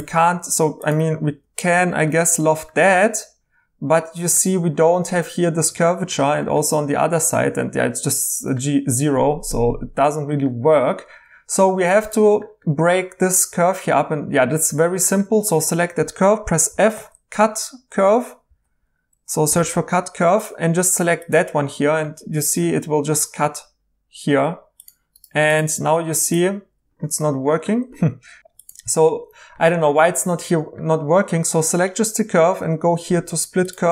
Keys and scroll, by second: 1.2 i, 9.4 Tab, 9.7 Tab, 10.4 Escape, 16.7 f, 18.5 c, 19.5 typing, 27.2 1, 28.4 typing.